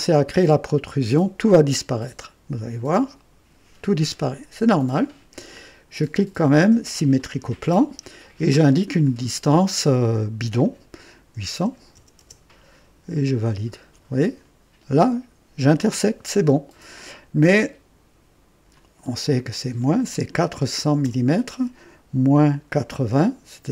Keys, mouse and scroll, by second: 3.0 click, 7.1 click, 9.0 click, 11.3 KP_8, 11.9 KP_0, 13.4 click, 13.7 typing, 18.7 click, 20.4-21.0 typing, 22.2 KP_Subtract, 22.2 typing.